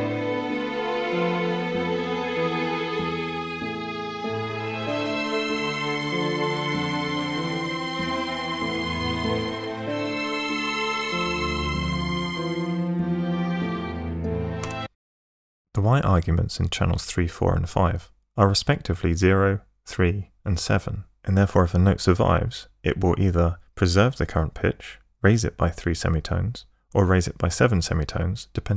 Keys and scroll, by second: 14.7 space.